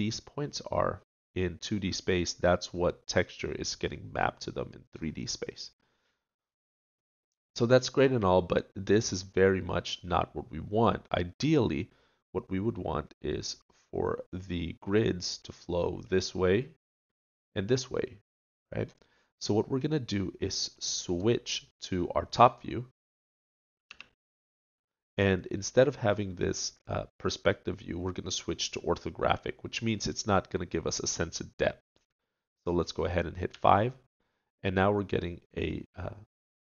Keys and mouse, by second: 5.4-7.1 middle drag, 7.2 middle click, 9.0-11.7 middle drag, 19.3 middle click, 20.6 middle click, 23.8 KP_7, 33.5 KP_5.